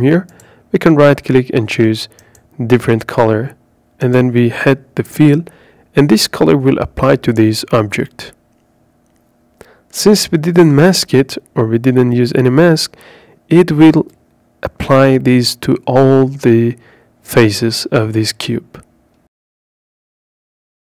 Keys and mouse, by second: 0.5 click, 1.8-4.2 drag, 4.5 click, 10.5 click, 12.2 click, 16.9 KP_Decimal.